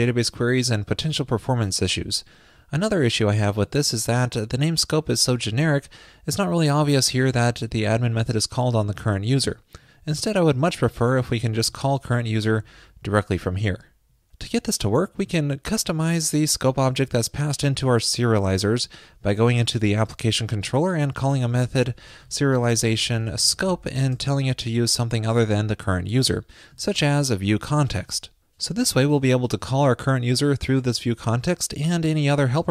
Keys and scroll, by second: 29.2 alt+shift+Left.